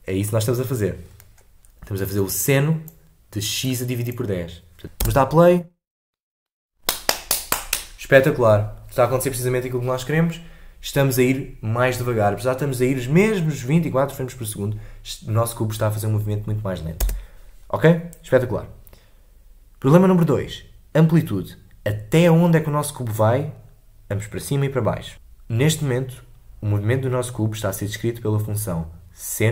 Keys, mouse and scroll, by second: 4.8 scroll down 4, 4.9 space, 17.0 space.